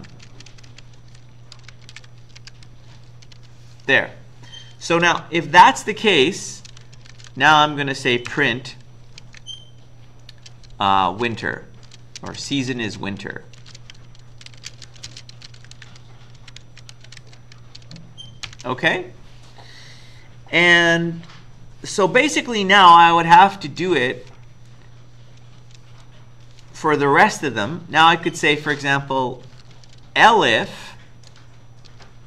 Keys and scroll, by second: 0.0-3.9 typing, 4.4 End, 5.0 Return, 6.5-9.2 typing, 10.9-18.5 typing, 23.4 Return, 23.8 Return, 27.2 BackSpace, 28.3 Up, 29.4-32.2 typing.